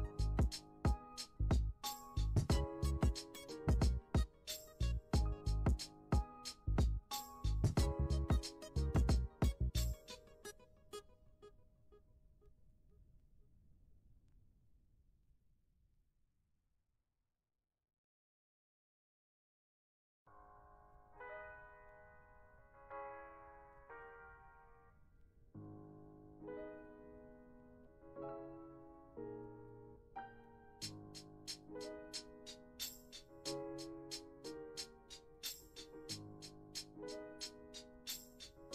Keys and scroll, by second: 34.0 F1, 36.8 F1.